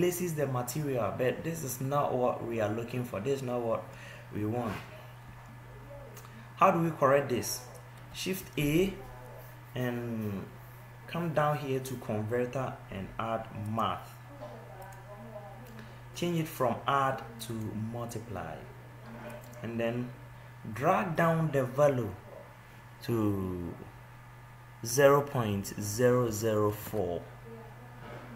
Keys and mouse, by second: 5.4 ctrl+z, 7.8 x.